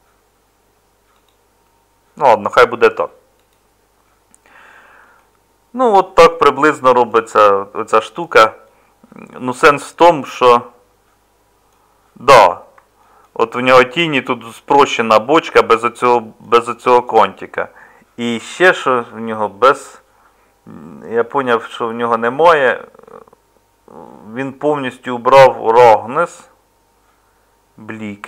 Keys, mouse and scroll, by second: 3.5 middle click, 4.1 middle click.